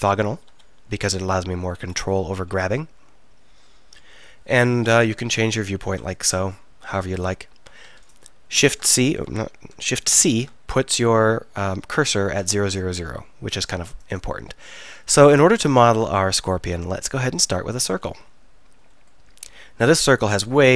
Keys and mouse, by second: 0.5 KP_1, 5.0 KP_1, 5.2 KP_3, 5.5 KP_7, 5.9 KP_1, 8.6 shift+d, 10.2 shift+c.